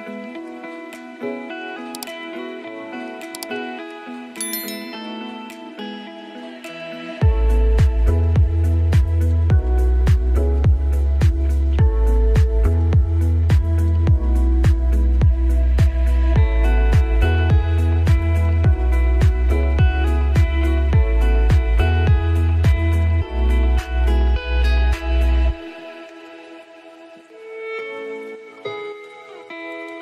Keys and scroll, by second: 3.1 ctrl+space.